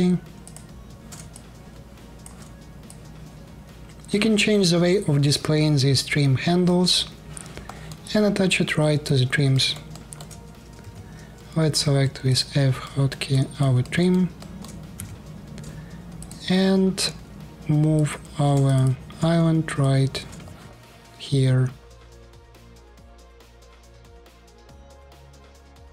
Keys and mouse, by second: 0.1 ctrl+shift+click, 0.3 ctrl+shift+middle click, 1.0-2.2 alt+drag, 2.6-9.4 drag, 9.6 alt+click, 9.7 alt+click, 9.9-13.0 middle drag, 10.5 f, 13.0-14.3 drag, 14.3 middle click, 14.7 f, 16.1-17.6 shift+middle drag, 17.8 shift+middle click, 19.5 shift+middle click, 20.2 alt+click, 20.3 alt+middle click, 20.5 alt+click, 21.3 middle click, 21.5 alt+click, 23.1 f, 24.1 f, 24.7 shift+middle click, 25.7 shift+drag.